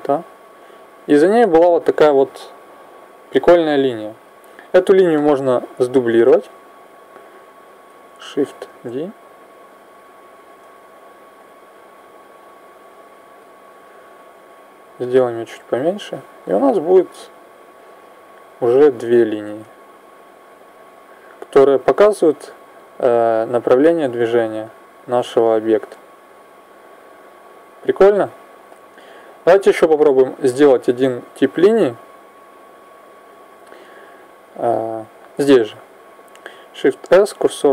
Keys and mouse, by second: 4.3 Escape, 5.4 click, 7.7 right click, 8.5 shift+d, 11.2-13.9 drag, 14.7 s, 17.7 click, 19.2 alt+a, 22.6-24.5 drag, 29.7-31.6 drag, 31.7 click, 35.2-36.8 middle drag, 36.8 shift+s.